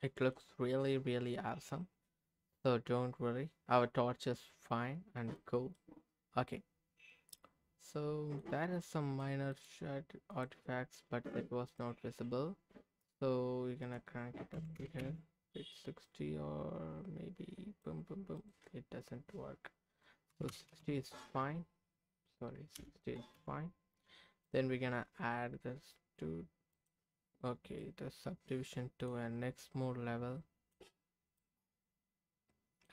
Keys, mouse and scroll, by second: 0.4-3.6 scroll down 3, 0.9-5.4 middle drag, 5.4-5.8 scroll up 3, 5.8-8.4 middle drag, 8.4-8.8 scroll up 2, 8.8 middle click, 9.5-10.5 right drag, 11.6 click, 13.0 click, 13.8-15.0 drag, 16.0-17.9 drag, 18.4-23.4 drag, 24.4 click, 26.7 click, 27.6 scroll down 1, 27.8-29.0 middle drag, 29.3 scroll up 2, 29.6-30.7 middle drag, 30.8-32.2 scroll down 3, 31.4-32.8 middle drag.